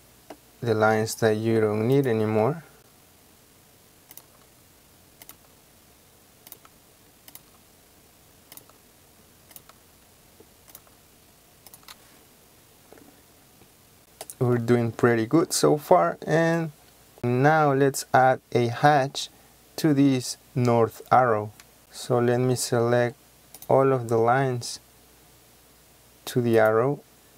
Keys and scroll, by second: 2.4 Delete, 4.3 Delete, 21.7 Escape.